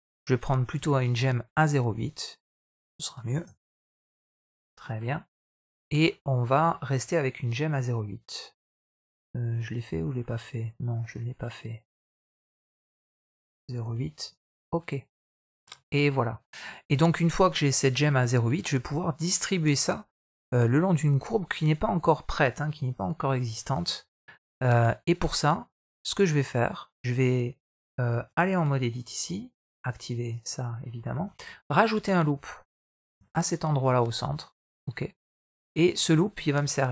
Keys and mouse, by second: 0.6 x, 1.8-5.5 drag, 6.4-8.4 middle drag, 8.8-10.0 middle drag, 11.0-15.0 drag, 15.6 middle click, 16.2 middle click, 20.9 middle click, 21.9 middle click, 22.8 Tab, 23.4 Tab, 28.1 Tab, 29.6 click, 30.1 click, 31.1 shift+middle click, 31.5 middle click, 32.9 ctrl+r, 35.6 middle click.